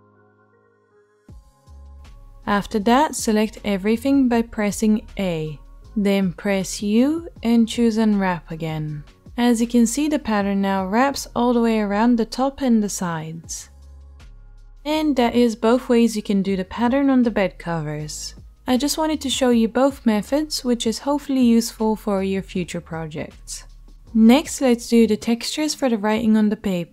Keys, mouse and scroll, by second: 0.6-10.4 drag, 3.1 a, 4.8 a, 5.5 u, 10.4-26.9 right drag.